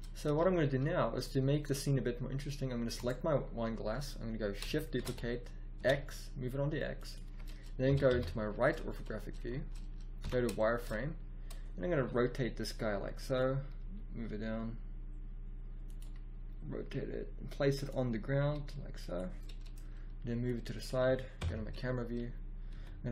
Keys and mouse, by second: 0.0 click, 0.2 a, 4.9 shift+d, 7.7 KP_5, 8.0 KP_3, 10.1 z, 11.8 r, 13.7 g, 16.2 click, 16.7 r, 18.3 g, 21.3 KP_0, 22.7 r.